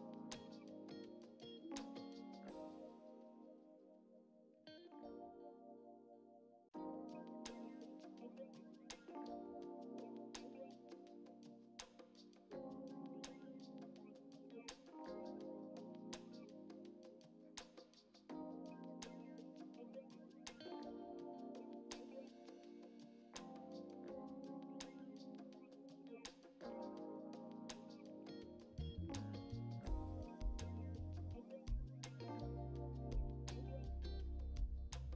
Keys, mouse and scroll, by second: 0.7 ctrl+r, 1.4 middle click, 1.5 scroll up 1, 1.6 shift+middle click, 2.1 ctrl+r, 3.2 scroll up 2, 3.3 shift+middle click, 4.1 click, 4.2 shift+click, 4.8 shift+middle click, 5.3 shift+click, 5.5 middle click, 5.7 shift+click, 6.3 shift+click, 6.5 middle click, 14.3 scroll down 3, 14.4 middle click, 14.6 click, 14.7 shift+middle click, 15.2 scroll up 1, 15.3-16.3 shift+middle drag, 16.3 click, 16.9 shift+middle click, 17.6 KP_1, 17.7 middle click, 18.6 click, 18.8 click, 18.9 middle click, 19.3-19.8 scroll down 1, 19.8 ctrl+z, 19.9 shift+middle click, 20.2 ctrl+r, 20.4 Escape, 20.7 Escape, 21.0 ctrl+r, 21.4-22.5 shift+middle drag, 22.5 scroll up 3, 22.7 click, 22.9 shift+middle click, 23.5 click, 24.2 click, 24.4 scroll down 2, 24.5 shift+middle click, 25.4 click, 25.6 middle click, 25.7 scroll up 1, 26.1 click, 26.2 middle click, 26.9 click, 27.0 scroll down 4, 27.2 shift+middle click, 27.7 Tab, 27.8 middle click, 28.3 right click, 28.4 scroll down 3, 28.5-29.1 middle drag, 29.3 Tab, 29.4 middle click, 29.5 scroll up 4, 29.7-30.7 shift+middle drag, 30.8 shift+middle click, 32.1 shift+middle click, 32.6 ctrl+r, 33.5 click, 34.3 click, 34.5 scroll up 1, 34.6 middle click.